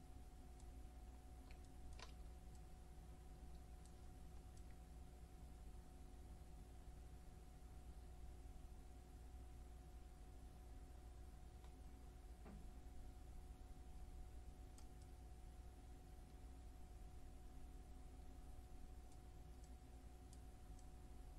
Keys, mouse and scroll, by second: 1.0-1.7 scroll up 2, 4.6-15.1 drag, 15.1-19.7 middle drag, 19.7-21.3 drag.